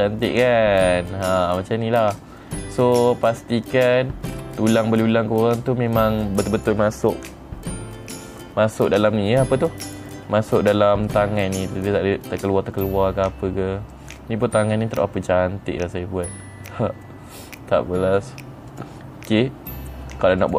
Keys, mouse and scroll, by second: 2.9 middle click, 4.3 click, 4.8 scroll up 3, 5.5 middle click, 9.8 middle click, 11.3-14.4 middle drag, 14.7-17.2 middle drag, 17.6 middle click, 19.2 click.